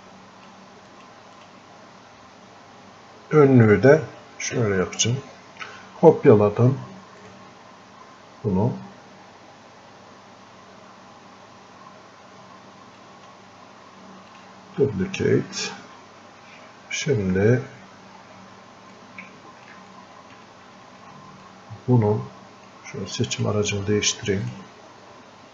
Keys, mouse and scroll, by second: 6.3 click, 13.0 click, 18.2-18.6 scroll up 1, 19.0 click, 20.0-21.5 alt+drag, 21.5-25.5 ctrl+shift+drag.